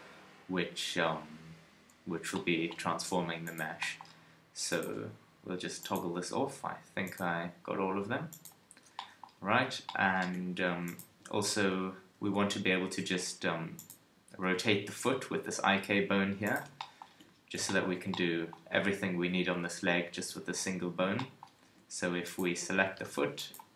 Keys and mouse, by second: 5.8-9.4 drag, 9.4 KP_3, 11.1 Tab, 12.1 ctrl+Tab, 12.9 g, 14.4 g, 20.3 KP_3, 21.7 Tab.